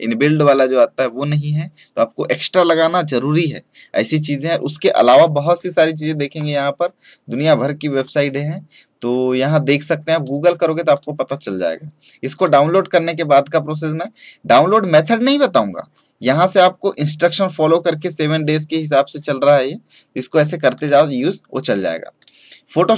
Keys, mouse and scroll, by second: 6.3-7.8 scroll down 1, 9.5 scroll up 1, 10.0 click, 20.7 click.